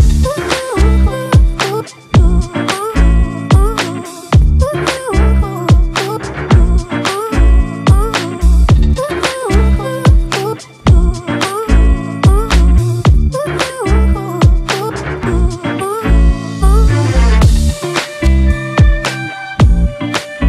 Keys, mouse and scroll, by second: 8.2 alt+right click, 14.4-18.5 scroll up 1.